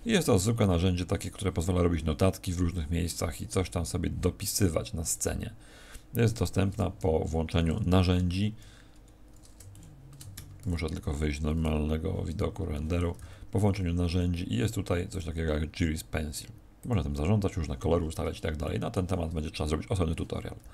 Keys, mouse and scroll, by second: 10.3 Escape, 10.3 shift+middle click, 10.3-10.7 scroll down 8, 11.2-11.7 scroll down 2, 12.7 shift+middle click, 13.1 n, 15.1 click, 18.0 click, 18.0-18.5 scroll down 5, 18.7 shift+middle click.